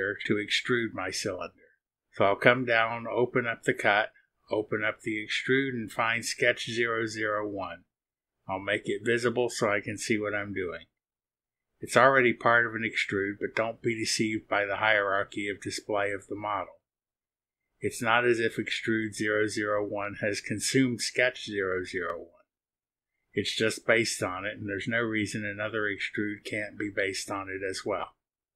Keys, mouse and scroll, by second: 2.4-2.7 scroll down 1, 4.3 click, 5.0-5.7 scroll down 2, 8.6 click, 9.3 scroll down 1, 10.9 click, 12.2 space, 28.3 click.